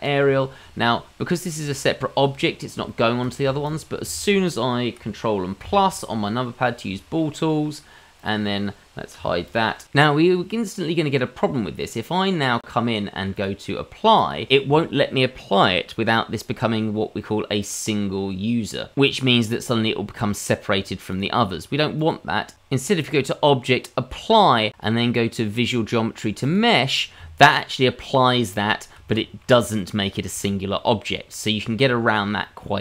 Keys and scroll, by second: 5.6 ctrl+KP_Add, 9.1 h.